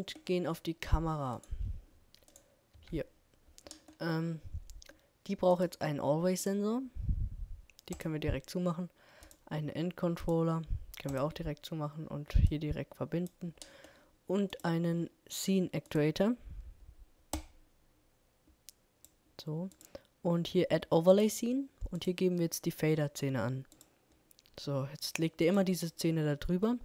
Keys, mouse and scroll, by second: 0.7-2.5 right drag, 2.0 KP_Decimal.